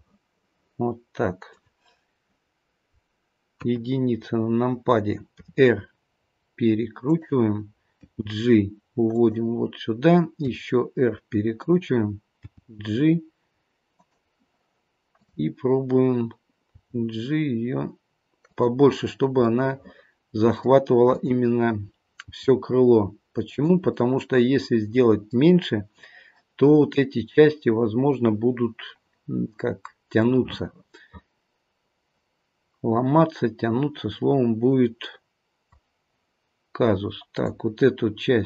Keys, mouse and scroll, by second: 3.5 KP_1, 5.4 r, 8.0 g, 10.4 r, 12.4 g, 15.1 click, 16.7 g, 19.5 middle click, 21.0 click, 22.2 g, 23.9 middle click, 30.2 middle click, 37.3 click.